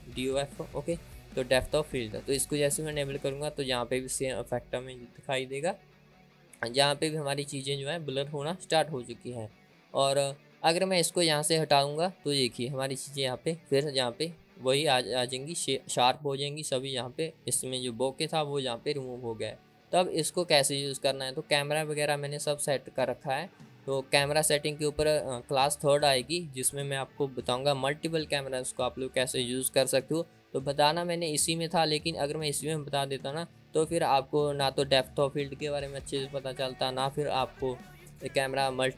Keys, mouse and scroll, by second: 12.4 click.